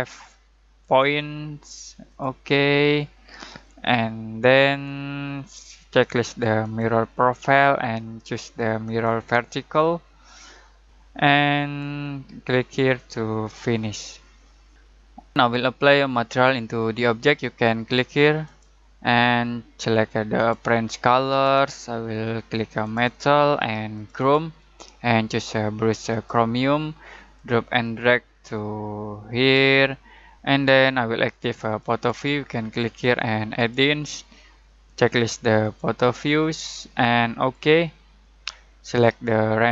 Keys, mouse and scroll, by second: 0.8 click, 3.7-14.7 drag, 4.8 typing, 18.4 click, 18.4-30.3 drag, 31.8 click, 31.8 click.